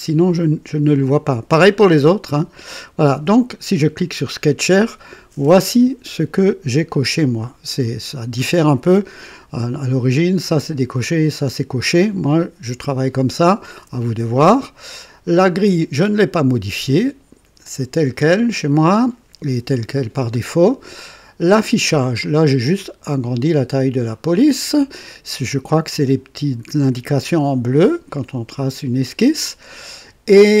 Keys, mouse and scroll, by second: 3.7 click, 15.5 click, 21.4 click.